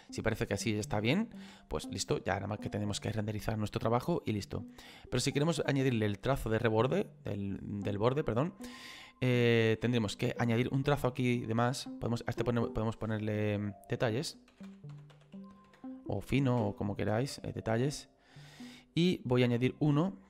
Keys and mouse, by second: 12.5 click, 14.7 e, 18.4 click, 19.6 click.